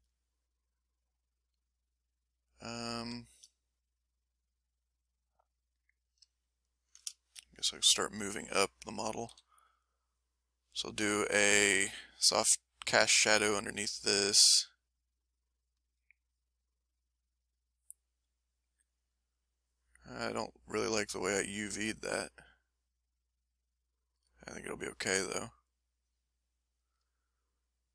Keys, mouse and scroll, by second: 3.1 shift+click, 3.6-5.9 shift+middle drag, 5.9 ctrl+middle click, 7.1-8.2 ctrl+shift+middle drag, 9.3 s, 9.6 middle click, 11.5 f, 11.6 click, 12.2 click, 12.7 click, 13.1 click, 13.4 click, 14.8-16.6 drag, 16.9 click, 17.2-19.1 drag, 20.4-21.9 drag, 22.3-24.3 ctrl+drag, 24.7 ctrl+click, 25.2 ctrl+middle click, 25.5 ctrl+click, 25.6 ctrl+middle click, 25.9-26.9 ctrl+drag, 27.1 ctrl+middle click, 27.8 ctrl+click.